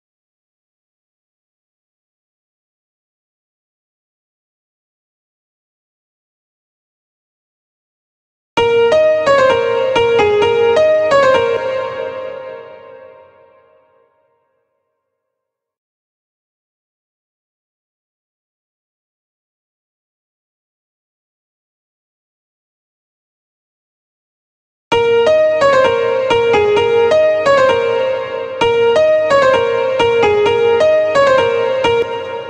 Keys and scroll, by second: 7.9 space, 10.9 space, 18.3 ctrl+b, 24.3 space, 31.4 space.